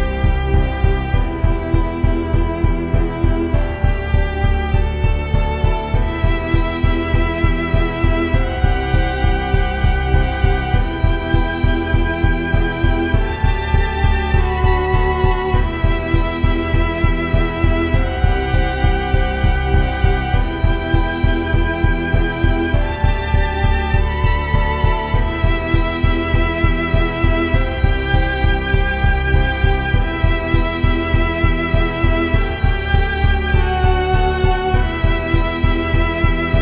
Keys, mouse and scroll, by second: 1.2 ctrl+b, 5.9-6.9 drag, 6.1 shift+a, 7.4 shift+a, 8.5 r, 9.7 s, 10.8 click, 13.3-15.7 drag, 16.4 shift+z, 21.5-23.1 drag, 23.9 click, 24.4 n, 24.9 click, 26.7-27.7 drag, 27.7 x, 28.3 shift+a, 30.5 g, 31.3 click, 31.9 click, 32.6 middle click, 34.4 click, 35.8 shift+z.